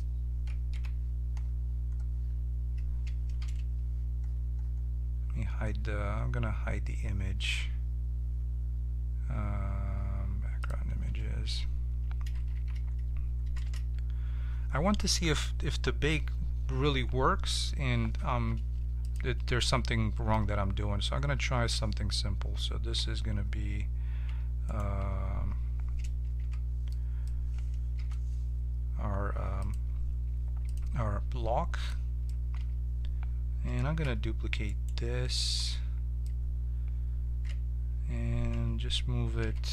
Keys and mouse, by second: 0.7 KP_Decimal, 3.4 n, 10.6-12.5 drag, 12.5 shift+c, 13.6 shift+a, 20.3 middle click, 22.9 Tab, 24.2 Tab, 24.6-26.3 drag, 24.9 Tab, 26.3 f, 27.9 u, 32.5 Tab, 33.9 shift+d, 38.5 Tab, 39.3 g.